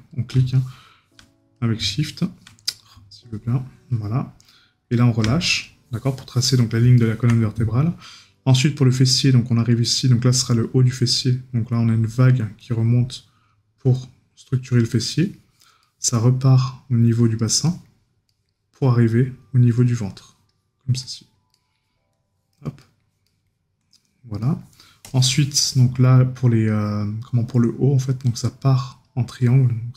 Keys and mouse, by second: 7.0 right click, 15.1 right click, 17.7 right click, 21.5 right click, 22.8 right click.